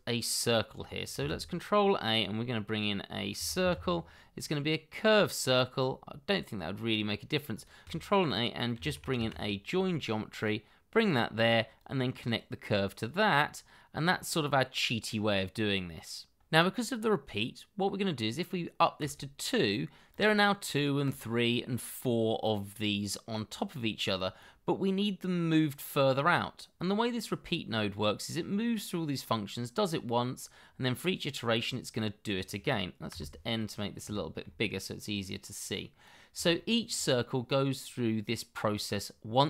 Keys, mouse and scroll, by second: 1.1 shift+a, 3.3 c, 3.6 i, 3.7 r, 8.2-9.3 typing, 24.1 double click, 33.1 n, 33.6-34.0 scroll up 1, 34.1 shift+middle click, 36.5 shift+middle click.